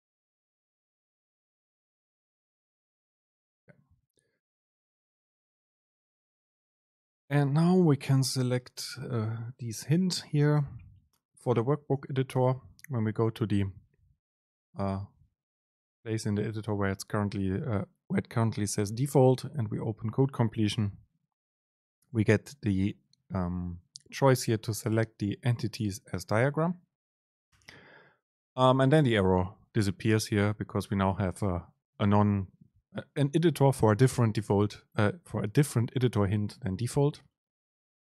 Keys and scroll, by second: 1.1 BackSpace, 4.2 Down, 11.9 super+space, 16.3 Home, 19.5 super+space.